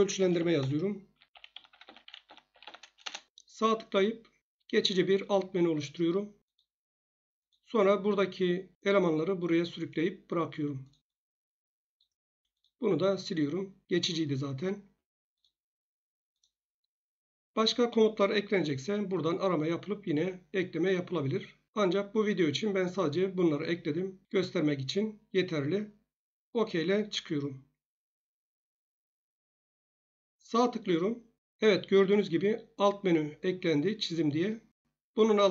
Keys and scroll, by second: 0.2-2.7 typing, 3.0 Return.